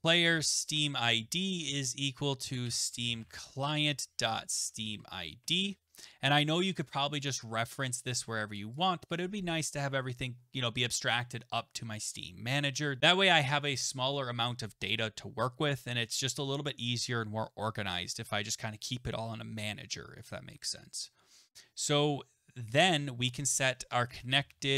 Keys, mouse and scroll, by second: 0.0-8.2 typing, 6.8 right click, 7.3 click, 8.6 click, 8.8 click, 23.8-24.7 typing.